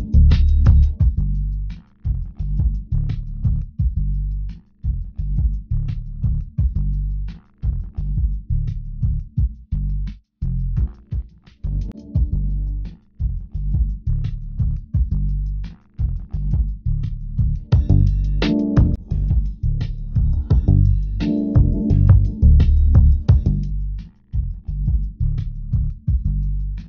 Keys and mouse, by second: 0.3 a, 1.1 b, 3.6 g, 8.9 click, 11.4 middle click, 11.6 middle click, 12.3 middle click, 13.2 z, 13.9 Tab.